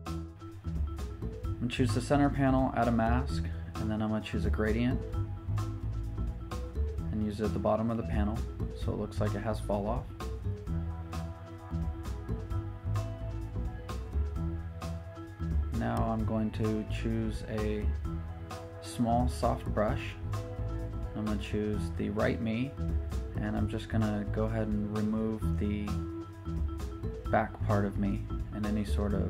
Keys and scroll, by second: 1.0 Down, 15.3 b, 25.6-25.9 typing.